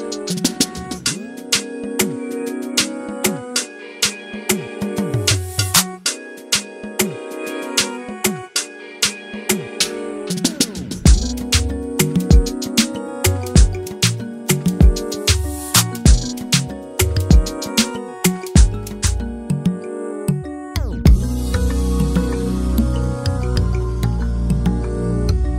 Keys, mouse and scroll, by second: 0.2 click, 0.4 KP_Decimal, 0.6 middle click, 0.9 Tab, 1.2 s, 1.8 scroll down 2, 1.9 middle click, 2.4 click, 2.7 click, 3.9 middle click, 4.5 click, 4.7 click, 4.9 scroll down 2, 5.0 shift+middle click, 5.2 Tab, 5.4 alt+a, 5.5 scroll down 7, 5.6 shift+middle click, 5.7-6.1 scroll up 2, 5.8 shift+middle click, 6.1 middle click, 6.2-6.6 scroll down 1, 6.6 KP_0, 7.2 z, 8.9 z, 9.1 click, 9.2 scroll down 3, 9.5 shift+middle click, 9.6-10.6 scroll up 2, 10.6 click, 11.1 z, 11.2 scroll up 2, 11.5 shift+middle click, 11.8-12.6 scroll up 8, 12.0 shift+middle click, 12.3 shift+middle click, 12.6 click, 12.8 shift+click, 13.1 shift+click, 13.3 shift+click, 13.7 ctrl+l, 13.8 alt+a, 13.9 scroll down 7, 14.1 KP_0, 14.5-15.0 shift+middle drag, 15.0 z, 16.3 click, 17.4 click, 17.9-18.4 scroll down 4, 19.2 click, 20.8-21.9 drag, 22.1-23.2 scroll down 2, 23.2 click, 24.1-25.5 drag.